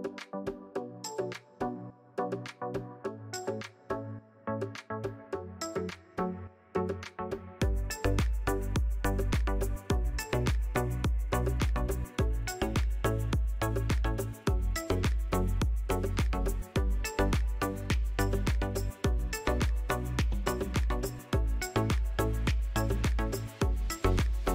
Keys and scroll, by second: 3.0 shift+d, 3.9 p, 4.7 Tab, 5.4 Tab, 6.0 a, 7.5 shift+z, 8.7 s, 11.0 ctrl+z, 11.7 s, 13.6 s, 21.9 ctrl+KP_3, 22.5 shift+z.